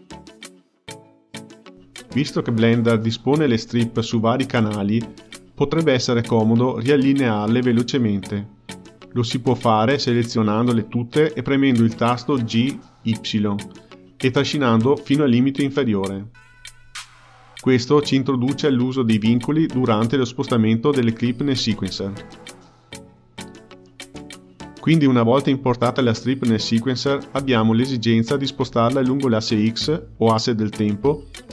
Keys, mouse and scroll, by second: 0.2 click, 0.7 Page_Up, 1.1 click, 1.7 Page_Up, 2.1 click, 2.6 Page_Up, 3.0 click, 3.4 Page_Up, 8.9 drag, 11.8 g, 18.7 g, 23.2 click, 24.4-27.4 drag, 31.0-31.5 drag.